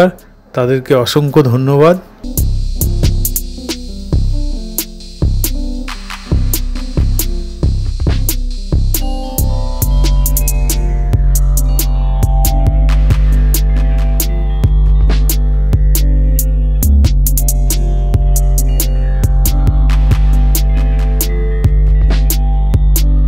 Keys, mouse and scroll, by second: 14.7 Up, 18.4 Up, 19.3 Up, 19.7 Up.